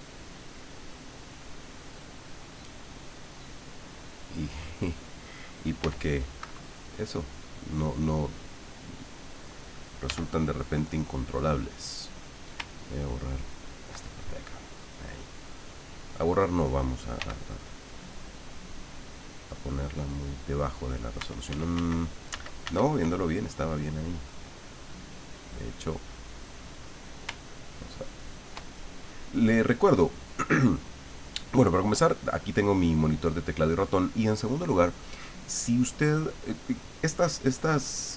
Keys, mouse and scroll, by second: 5.8 f, 6.4 Escape, 7.4 click, 8.3 click, 10.0 f, 12.0 click, 13.1 ctrl+click, 14.7-16.3 drag, 17.2 f, 17.6 click, 18.1 click, 19.4 click, 21.5 ctrl+z, 24.0-27.2 drag, 27.6 ctrl+click, 28.3 ctrl+click.